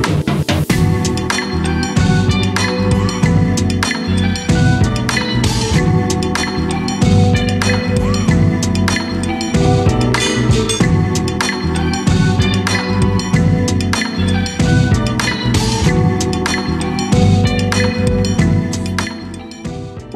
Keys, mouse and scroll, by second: 3.5 KP_3, 5.3 g, 10.5 click, 10.9-13.3 middle drag, 13.3 scroll down 1, 13.5-14.6 middle drag, 14.6-15.0 scroll down 2, 15.0-16.6 middle drag, 16.6 scroll down 1, 16.8-17.3 middle drag, 17.3 click, 18.0 Tab, 18.3 click, 19.4 shift+s.